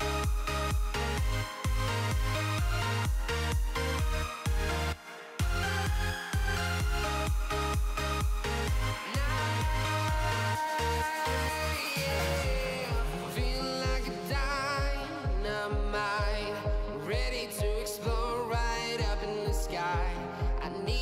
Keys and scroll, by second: 11.9 Escape.